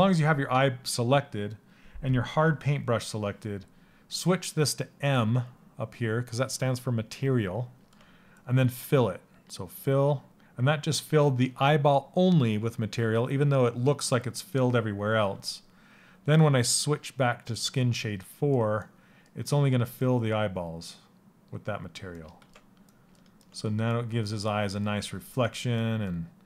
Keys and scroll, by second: 24.3 s.